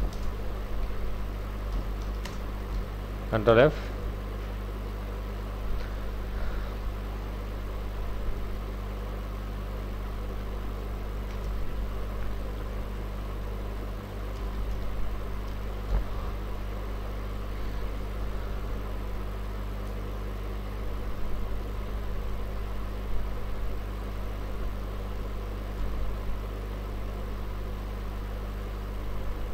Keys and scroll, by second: 0.0 alt+s, 0.1 alt+Return, 1.7 alt+i, 1.8 alt+a, 2.0 alt+c, 2.2 alt+Return, 2.8 ctrl+alt+f, 11.1 ctrl+a, 11.4 ctrl+c, 11.6 ctrl+w, 14.5 v, 14.8 v, 15.9 alt+Tab, 20.7 Right, 21.9 Left, 22.1 Left, 23.1 Right, 23.3 Right, 25.9 alt+Tab.